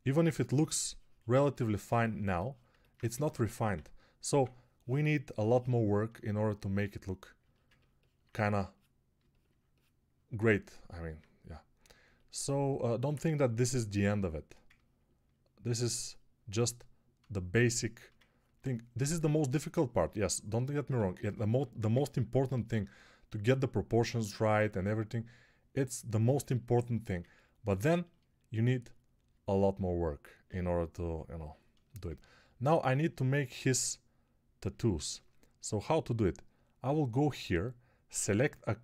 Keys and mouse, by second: 2.9-4.2 typing, 35.1 alt+q.